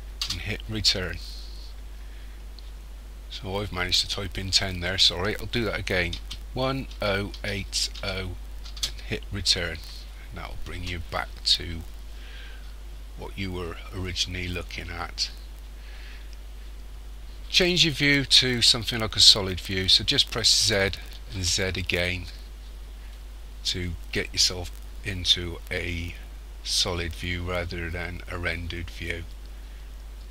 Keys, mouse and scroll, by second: 4.8 click, 20.6 z, 21.3 z.